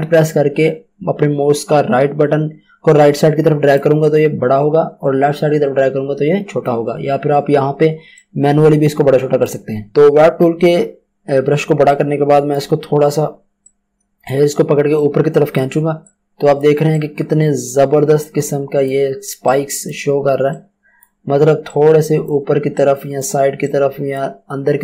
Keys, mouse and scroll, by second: 4.0 alt+right click, 8.1 click, 11.8 click.